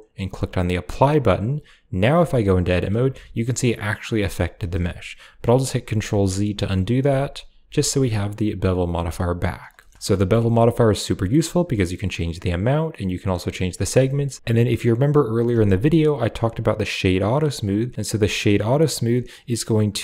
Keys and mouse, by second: 2.1 Tab, 3.0 a, 4.4 Tab, 5.8 ctrl+z, 7.0 ctrl+z, 7.5 ctrl+z, 9.0 click, 9.7 shift+middle click, 9.9 middle click, 10.7-12.3 shift+drag, 12.7 shift+click, 13.7 shift+middle click, 13.9 shift+middle drag, 14.4 q, 15.3 w.